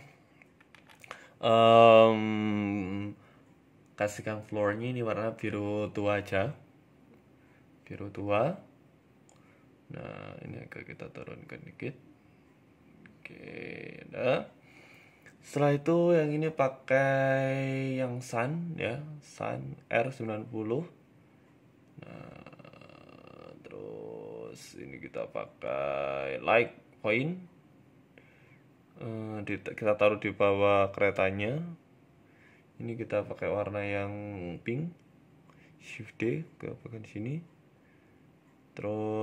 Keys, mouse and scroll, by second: 0.0 shift+middle click, 0.4 right click, 1.2 click, 1.6 click, 2.5 o, 3.9 click, 8.3 scroll down 2, 8.6 KP_0, 9.0-10.3 scroll down 4, 9.5 shift+middle click, 10.3 right click, 11.1 g, 13.2-14.2 scroll up 2, 13.6 shift+middle click, 14.2-14.7 scroll down 3, 14.4 shift+middle click, 14.7 right click, 15.8 z, 16.6-17.5 scroll up 3, 17.6 click, 18.5 r, 20.7-21.2 scroll up 1, 21.2 shift+middle click, 21.2-22.3 scroll up 1, 22.3-22.7 scroll down 3, 22.6 shift+middle click, 23.7 shift+a, 26.6-27.2 scroll up 2, 27.2 scroll up 2, 27.2 KP_Decimal, 28.0 KP_1, 28.6 shift+middle click, 29.1 g, 30.1 middle click, 30.5 shift+middle click, 31.1 g, 32.7 click, 33.2 click, 35.1 shift+d, 36.4-36.8 scroll down 2, 36.6 middle click, 37.4 KP_3, 37.8 KP_1, 38.4 shift+middle click, 38.7 shift+d.